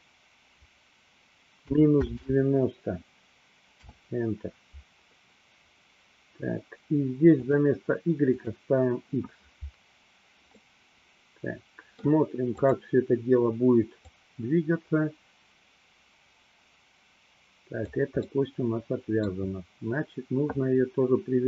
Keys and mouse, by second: 7.6-8.6 drag, 10.7-12.2 middle drag, 12.8 click, 14.2-18.1 drag, 18.3-19.6 middle drag.